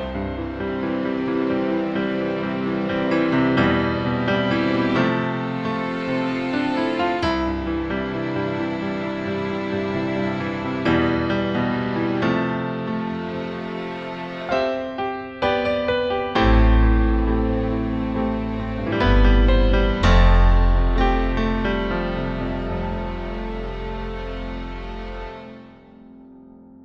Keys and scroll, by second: 1.5 BackSpace, 4.7 BackSpace, 7.3 BackSpace, 7.9 BackSpace, 10.6 BackSpace.